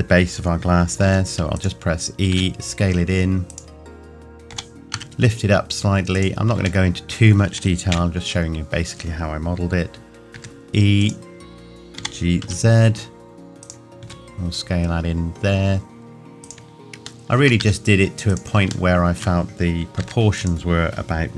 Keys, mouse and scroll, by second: 1.0 e, 1.6 click, 2.3 s, 3.5 click, 4.5 g, 6.1 click, 6.9 middle click, 7.9 KP_1, 10.3 e, 11.0 click, 12.0 g, 13.6 click, 14.0 s, 16.4 click, 17.3 shift+middle click, 17.6 s, 18.3 click, 18.9 shift+middle click, 20.0 e, 20.4 click.